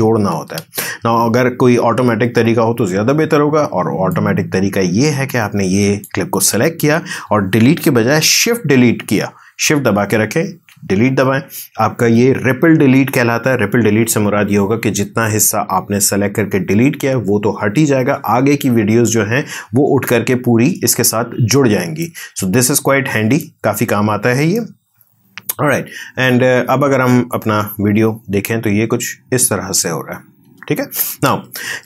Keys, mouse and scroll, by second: 0.0 click, 0.8 ctrl+z, 4.1-10.5 drag, 10.5 shift+Delete, 22.0-26.3 drag, 26.3 space, 30.4 space, 31.3 ctrl+z.